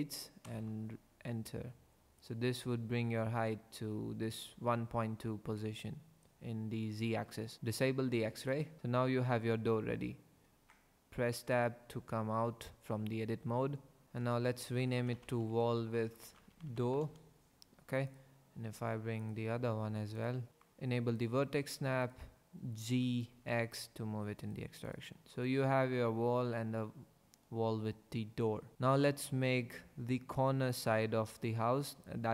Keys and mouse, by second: 0.4 KP_Enter, 8.5 click, 10.5 Tab, 11.5 click, 14.0-17.0 drag, 14.0 o, 15.1 l, 16.7 o, 19.2 click, 21.2 click, 22.8 g, 23.3 x.